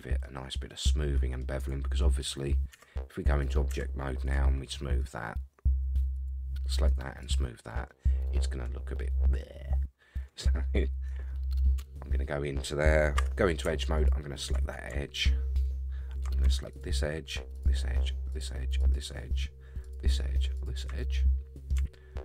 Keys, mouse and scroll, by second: 0.5 middle click, 1.6-3.2 right drag, 3.4 click, 3.7 Tab, 4.2-5.2 right drag, 6.1 click, 6.9 right click, 7.9-10.5 middle drag, 11.3-11.6 middle drag, 11.8 Tab, 13.2 2, 13.9 alt+click, 16.7 shift+click, 17.5 shift+click, 18.3 shift+click, 18.8 shift+click, 19.8 shift+click, 20.5 shift+click, 21.0 middle click.